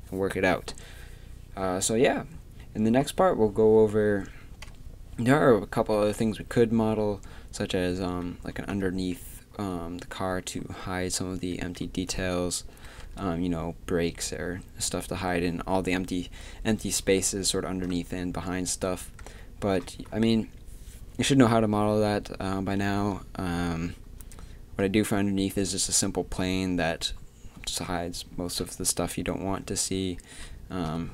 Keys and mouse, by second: 4.7 KP_3, 13.0 KP_3, 31.0 KP_3.